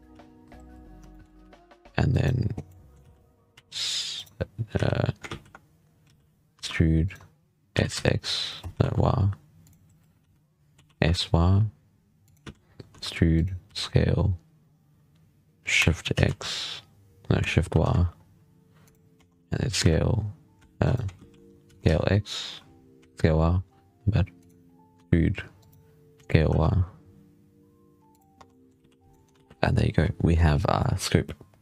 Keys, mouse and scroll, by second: 0.0 z, 0.9 shift+middle click, 1.2 e, 2.5 middle click, 2.8 z, 3.4 s, 4.6 z, 5.1 ctrl+z, 6.4 e, 7.6 s, 10.1 z, 10.7 s, 12.3 z, 12.8 e, 13.6 s, 19.7 s, 21.0 ctrl+z, 21.6 s, 24.8 e, 26.0 s, 28.2 Tab, 28.4-28.7 middle drag, 28.7 z, 28.8 scroll down 2, 29.0 middle drag, 29.2 alt+a, 29.4 scroll up 1, 29.5-31.6 middle drag.